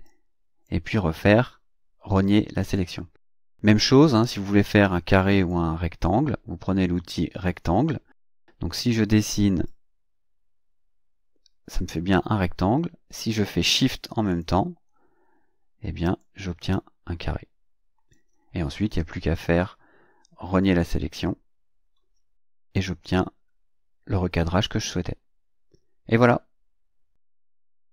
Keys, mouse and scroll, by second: 0.1 click, 5.3 click, 9.7 click, 14.3 shift+click, 16.2-18.3 shift+drag, 20.8 click.